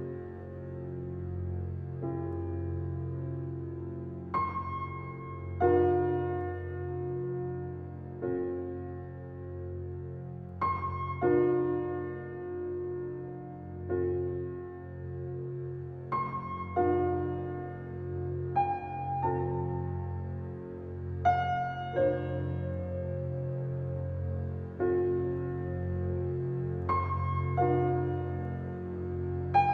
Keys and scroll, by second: 0.5 Left, 2.8 Left, 4.8 Left, 6.2 Left, 8.4 Left, 15.2 Left, 17.1 Left, 18.4 Left, 20.9 Left, 22.7 Left, 25.6 Left, 26.8 Left, 28.9 Left.